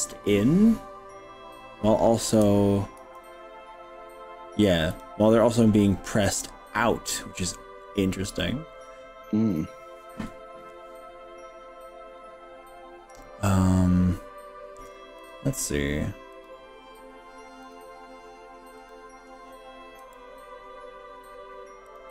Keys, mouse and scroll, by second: 0.1 middle click, 0.7 middle click, 1.3 scroll down 2, 2.3 KP_1, 3.0 KP_3, 4.9 click, 15.3 click, 16.4 click, 17.7 click, 18.9 click, 20.1 g, 21.9 click.